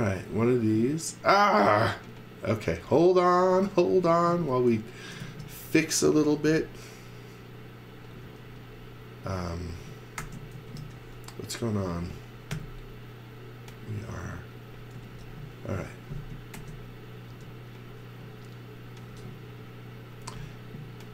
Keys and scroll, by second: 3.5 space, 4.9-6.3 typing, 7.4 m, 8.2 space, 9.9-11.3 typing, 12.5 l, 14.7-16.5 typing, 17.3 Return, 18.3 space.